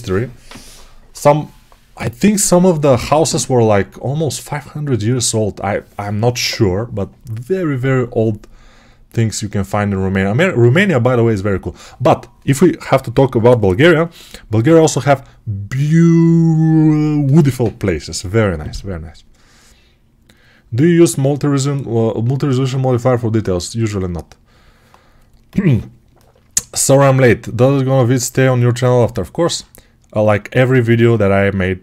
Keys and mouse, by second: 26.6-31.8 alt+right drag.